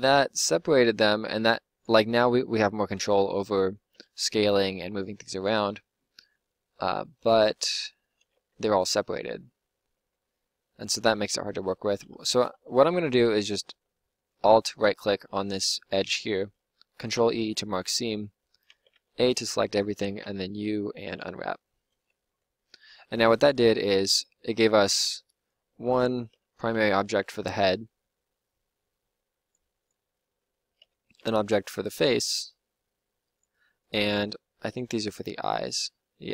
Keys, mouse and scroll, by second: 2.9 l, 3.8 s, 4.9 g, 8.0 click, 8.3 Tab, 9.9 Tab, 17.0 ctrl+e, 18.0 click, 18.6 a, 18.9 a, 20.2 u, 23.4 click, 24.1 a, 24.5 a, 26.3 l, 27.0 g, 30.8 l, 32.0 g, 34.7 l, 35.2 g.